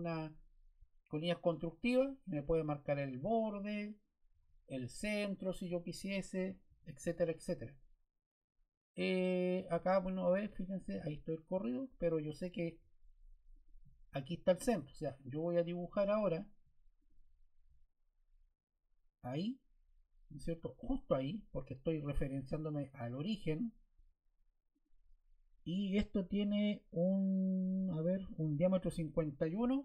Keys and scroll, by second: 4.2 Escape, 6.6 l, 11.7 Escape.